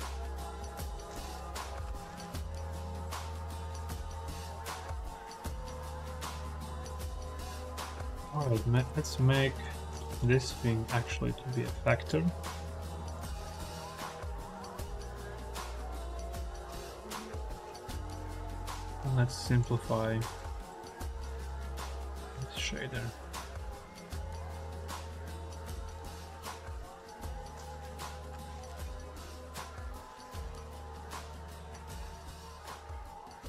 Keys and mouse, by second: 4.1-5.9 middle drag, 6.1 middle click, 6.4 middle click, 9.8 middle click, 10.7-12.0 drag, 12.6 x, 13.0 middle click, 14.4 middle click, 15.1 middle click, 15.9 click, 16.6 click, 17.5 middle click, 18.8 click, 19.4 click, 21.3-21.6 drag, 22.1 drag, 22.6 click, 26.5 click, 30.6 click, 31.2 click, 31.6 click.